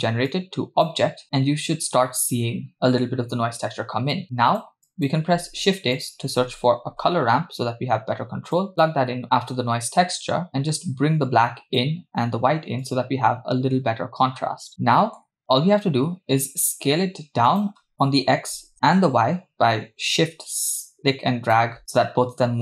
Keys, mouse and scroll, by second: 0.3-1.1 drag, 4.3-4.7 drag, 4.8 click, 5.3 shift+a, 10.5-11.9 drag, 12.9-14.7 drag, 14.7 middle click, 15.4-16.0 scroll up 3, 17.5 click, 18.0-22.6 drag.